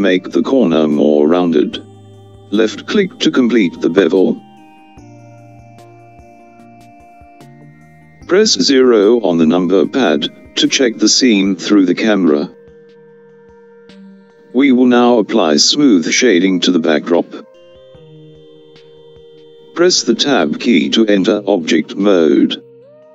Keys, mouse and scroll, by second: 11.0 KP_0, 19.7 Tab.